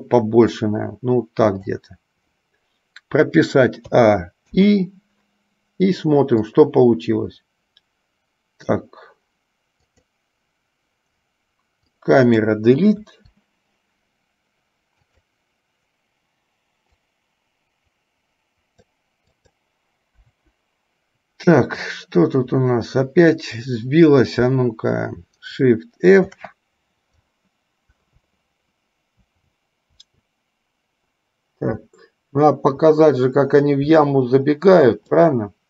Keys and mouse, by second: 4.1 a, 4.8 i, 6.6-9.0 drag, 12.0-12.6 drag, 13.1 Delete, 15.1 click, 17.2 click, 19.6 click, 20.3 Delete, 22.2 click, 26.3 shift+f.